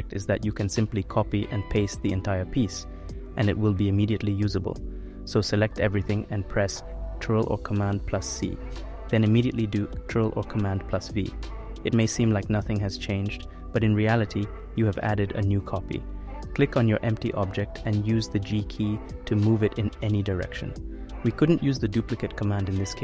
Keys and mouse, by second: 0.4-1.9 drag, 3.0 click, 3.8 click, 6.4 ctrl+c, 7.3 ctrl+v, 9.0 click, 12.2 g, 14.4 click, 15.4 click, 17.3 g, 19.5 click, 22.3-23.0 drag.